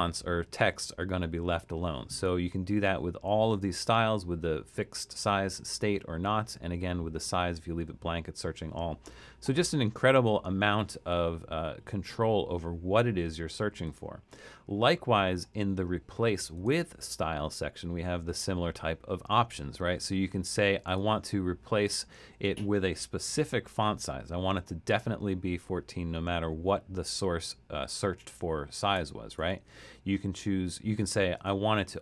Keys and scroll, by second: 23.0-23.9 typing, 29.0 BackSpace, 29.4 BackSpace.